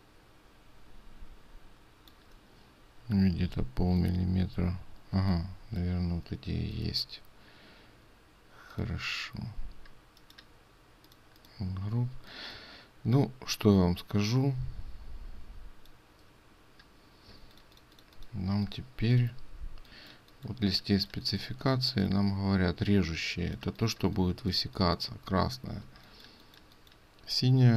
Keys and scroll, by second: 17.5 ctrl+space.